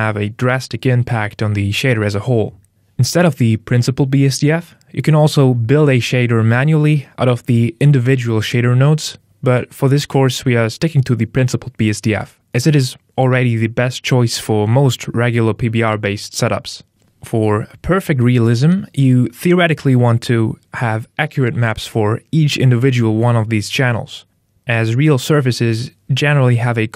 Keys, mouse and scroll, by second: 0.8 click, 5.5 middle click, 6.1 shift+a, 10.7 middle click, 12.4-12.8 scroll up 1, 12.8 middle click.